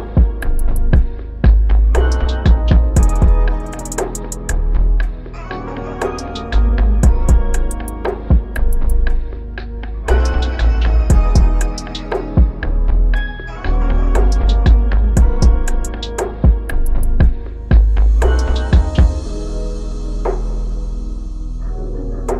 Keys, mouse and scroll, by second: 0.3 ctrl+h, 8.0 shift+click, 9.6 Delete, 13.2 shift+Up, 13.7 shift+Up, 14.2 shift+Up, 14.5 shift+Up, 14.8 shift+Up, 15.1 shift+Up, 16.3 shift+Down.